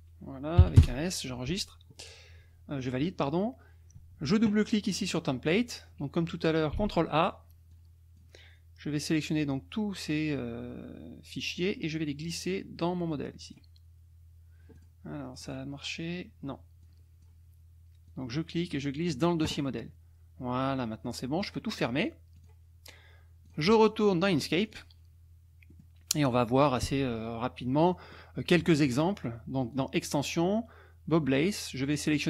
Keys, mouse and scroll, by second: 0.6 5, 0.8 Return, 4.9 click, 6.5 ctrl+click, 6.7 ctrl+a, 7.7 click, 11.6-13.7 drag, 14.8 click, 15.3 click, 16.8 click, 18.1-19.4 drag, 21.4 click, 22.3 click, 24.7 click, 25.6 click, 27.6 click, 28.5 click, 28.6 middle click, 29.7 click.